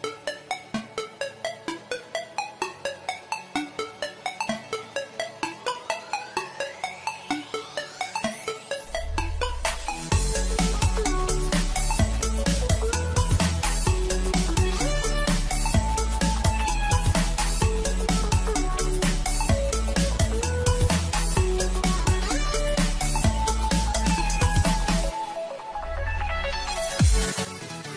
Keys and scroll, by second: 10.0 ctrl+e, 11.6 ctrl+j.